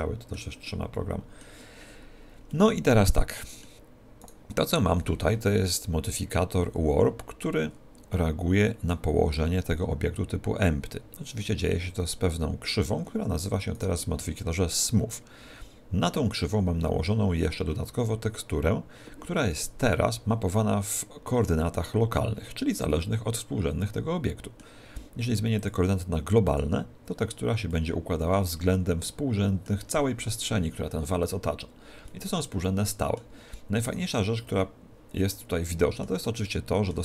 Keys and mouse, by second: 4.4 right click, 8.2-9.9 middle drag, 9.5 click, 13.9 right click, 22.9-25.6 middle drag, 25.6 click, 27.7-29.5 middle drag, 32.1-34.1 middle drag, 34.1 right click, 34.6-37.0 middle drag.